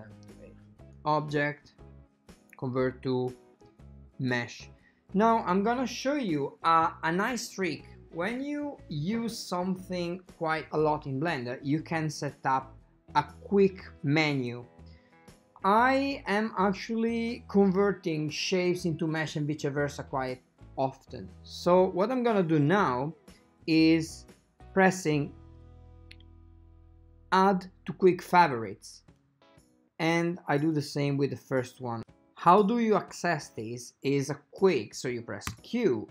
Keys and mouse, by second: 1.0-32.0 drag, 35.6 q.